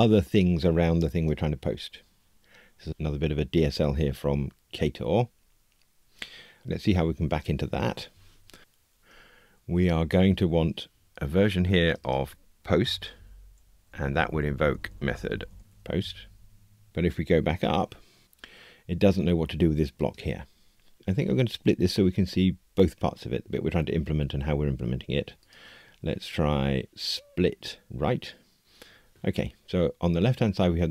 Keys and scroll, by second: 11.1 super+d, 15.6 alt+shift+Left, 16.9 Return.